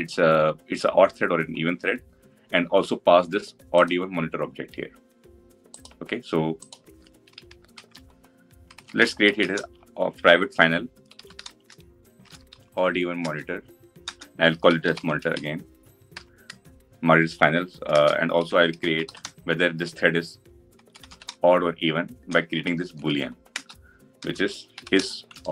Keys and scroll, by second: 13.0 Return, 23.3 Return.